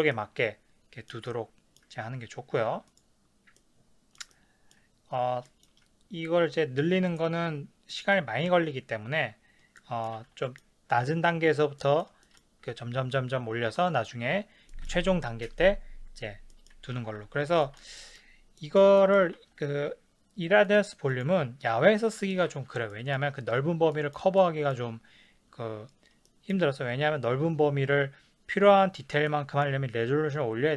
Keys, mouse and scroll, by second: 2.9 click, 3.6-7.1 middle drag, 7.1 click, 7.9 click, 9.8-20.6 middle drag, 10.2 ctrl+s, 17.0 ctrl+s, 19.4 ctrl+s, 20.6 click, 20.8 middle drag, 21.1 click, 21.3-28.9 middle drag, 22.6 ctrl+s.